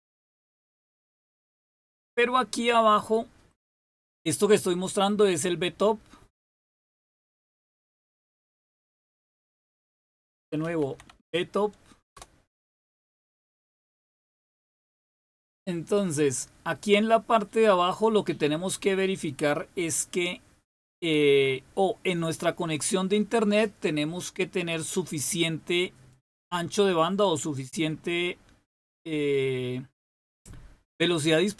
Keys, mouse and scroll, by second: 7.7 typing, 10.1-11.6 typing, 12.1 Return.